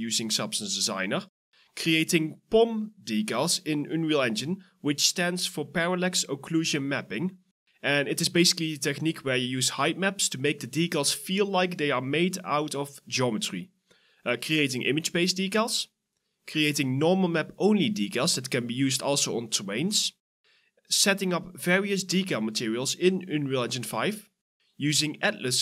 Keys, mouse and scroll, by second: 1.4-4.2 typing, 1.6 scroll up 1, 2.6 double click, 3.2 Return, 3.7 right click, 5.8 right click, 5.9-8.0 typing, 6.2 scroll down 1, 6.9 scroll up 1, 7.9 alt+right click, 8.1 alt+click, 8.3 alt+right click, 8.4 alt+click, 8.5 alt+middle click, 8.7 alt+click, 10.7 alt+click, 13.7 scroll up 1, 14.2 right click, 14.6 w, 15.1 right click, 15.1 a, 16.5-18.2 typing, 16.7 right click, 18.1 right click, 20.1 w, 20.4 right click, 21.3 Return, 24.2 scroll down 1, 24.6-25.6 typing, 25.2 double click.